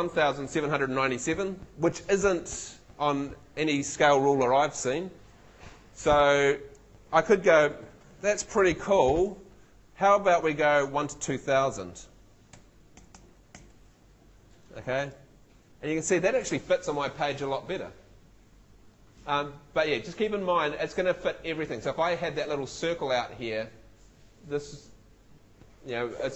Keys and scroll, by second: 12.5 2, 13.0 0.